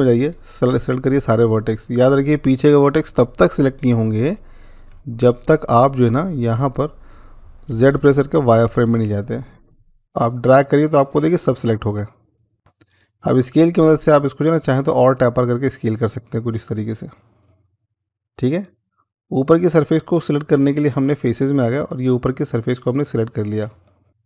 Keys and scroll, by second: 7.7-8.9 z.